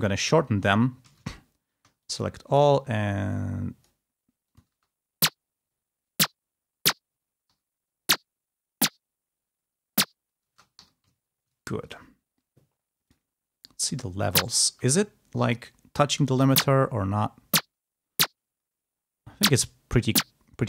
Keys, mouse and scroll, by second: 0.2 e, 0.7 ctrl+scroll up 2, 1.0 ctrl+a, 1.9-3.9 alt+drag, 4.3 click, 4.6 space, 7.4 g, 10.5 space, 10.7 g, 11.8 ctrl+click, 13.0 click, 13.8 space, 14.6 space, 15.0-15.5 scroll up 4, 15.9 space, 16.5 click, 19.5-20.3 scroll down 4.